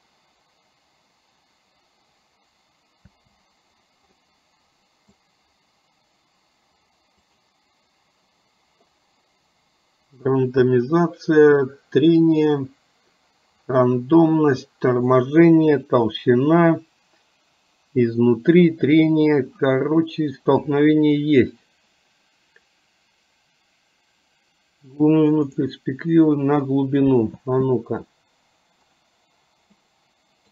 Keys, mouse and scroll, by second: 3.2 space, 4.3-5.3 middle drag, 27.4 space, 29.1 click, 30.1-30.5 middle drag.